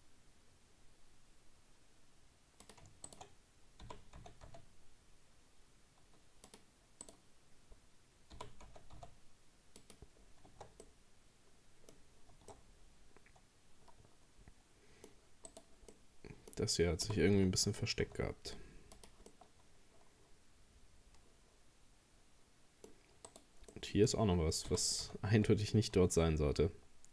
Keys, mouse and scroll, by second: 3.1 shift+right click, 3.8 g, 7.0 right click, 8.4 g, 10.2 scroll down 4, 10.5 Tab, 10.8-12.0 middle drag, 12.0-12.3 scroll up 2, 12.3 Tab, 12.5-15.5 middle drag, 15.5 right click, 15.9-17.1 middle drag, 17.1 g, 19.3-22.3 middle drag, 23.3 right click, 23.7 middle click, 24.7 g.